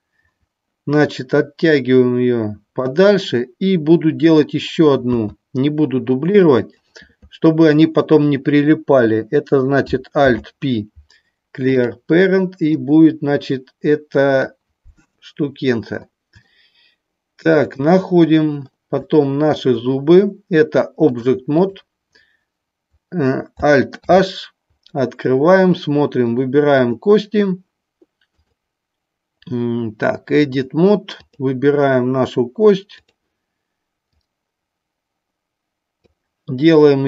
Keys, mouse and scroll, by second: 1.8-2.8 drag, 4.2 click, 6.3 click, 6.7 click, 10.2 alt+p, 12.6-14.4 drag, 18.9 shift+middle click, 21.1 click, 23.9 alt+h, 26.7 click, 28.2-30.5 drag, 31.2 click, 34.0-35.9 drag.